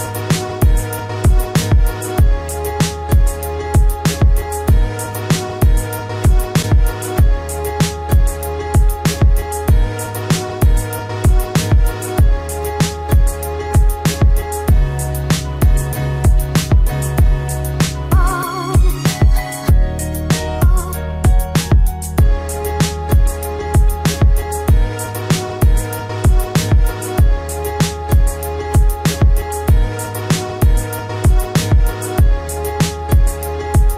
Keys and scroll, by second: 12.3 BackSpace, 30.7 ctrl+alt+z.